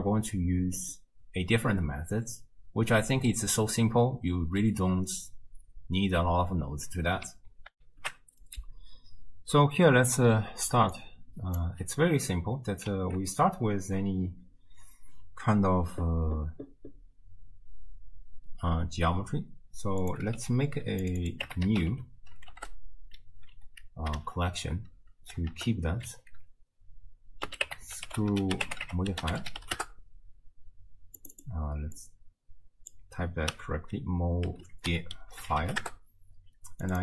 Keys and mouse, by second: 7.8 ctrl+alt+shift+q, 11.0-11.6 drag, 12.9 ctrl+x, 20.4 c, 21.3-29.8 drag, 31.2 click, 31.5-35.8 drag, 36.8 click.